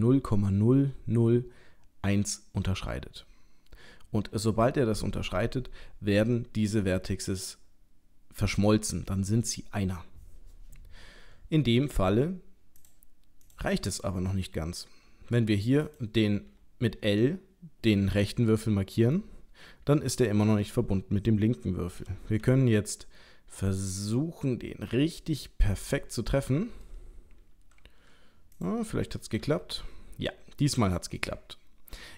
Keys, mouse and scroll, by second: 12.8 click, 13.4 click, 15.8 click, 16.5 l, 18.3 middle click, 20.1 shift+middle click, 20.8-21.3 scroll up 1, 22.0 g, 26.5 middle click, 28.5 click, 29.4 l, 30.2-30.8 scroll down 3, 30.8-31.2 scroll up 1, 31.2 middle click.